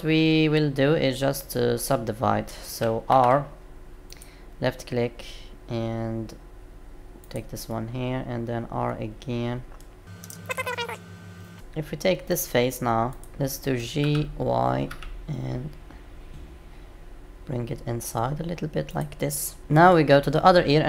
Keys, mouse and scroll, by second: 3.1 ctrl+r, 7.7 middle click, 12.2 click, 13.0 click, 14.0 g.